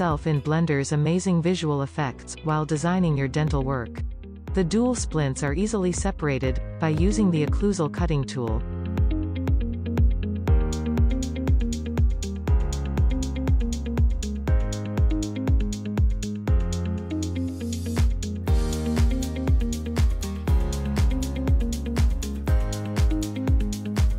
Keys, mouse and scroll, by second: 0.5 click, 1.3 middle click, 2.6 scroll up 1, 5.2-6.2 drag, 6.2 scroll down 1, 6.8-9.2 middle drag, 9.2-9.6 scroll up 1, 9.8 click, 10.2 h, 10.6-11.0 drag, 11.0-11.4 scroll up 1, 11.4 click, 12.0 scroll down 2, 12.1-12.8 middle drag, 12.8 scroll up 1, 12.9 shift+middle click, 13.4 click, 14.6 scroll down 1, 16.4 click, 17.1 ctrl+z, 17.6 g, 19.1 ctrl+i, 21.4 click, 21.7 shift+middle click, 22.1-23.7 drag, 24.0 shift+middle click.